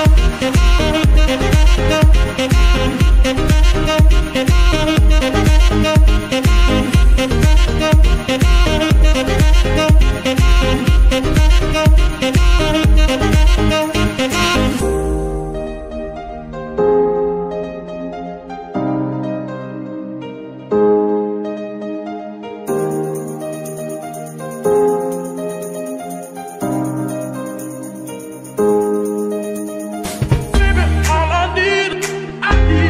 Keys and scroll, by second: 0.5 Escape, 0.8 r, 0.9 r, 2.1 Escape, 7.1 r, 7.3 r, 9.2 Escape, 10.2 r, 10.3 r, 10.9 Escape, 12.9 g, 13.1 y, 13.3 y, 18.1 Escape, 24.0 ctrl+shift+s.